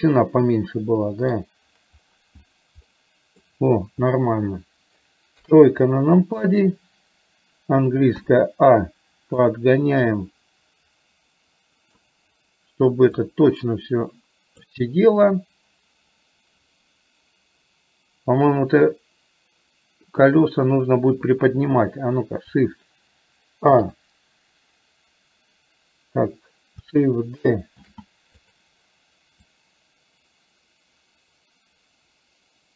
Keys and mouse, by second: 3.1 middle click, 5.4 KP_3, 6.6 click, 8.3 a, 9.6-12.2 drag, 13.7-14.8 drag, 23.8 shift+a, 27.9 shift+d, 29.4-32.7 drag.